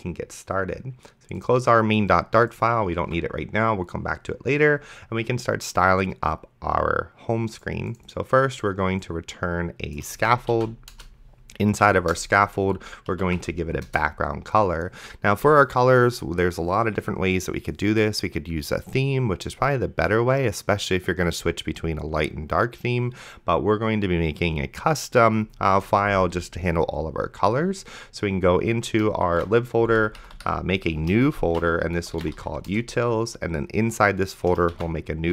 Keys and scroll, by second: 3.3 ctrl+s, 10.2-11.1 typing, 11.8 Right, 12.1 Return, 12.9-13.8 typing, 13.9 Return, 29.5 ctrl+shift+e, 30.2 Up, 31.7 ctrl+shift+f, 31.7-32.9 typing, 34.9 ctrl+shift+n, 35.1-35.3 typing.